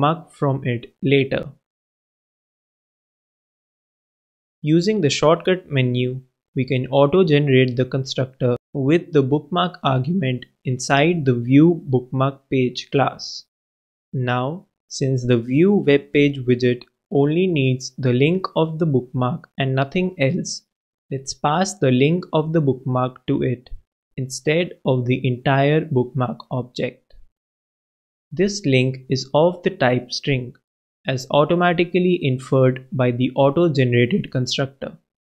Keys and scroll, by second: 1.0-1.8 typing, 8.1 super+[, 8.7 alt+Return, 10.4 super+Return, 10.9 super+Down, 11.0 super+BackSpace, 11.2 super+Up, 11.7 super+Return, 12.8-13.6 typing, 15.5 shift+., 15.7 shift+BackSpace, 16.1 alt+super+l, 23.4 super+b, 25.2 super+[, 26.2 alt+super+[, 26.3 alt+super+Return, 30.5 super+Return, 30.6 super+Left, 30.8 super+Return, 31.5 shift+Up, 31.6-32.5 typing.